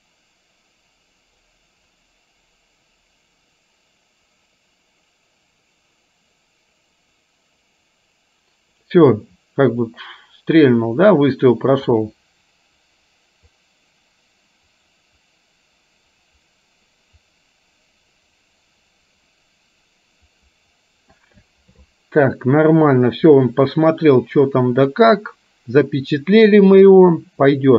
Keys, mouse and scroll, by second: 23.4-25.0 middle drag, 27.1-27.7 middle drag.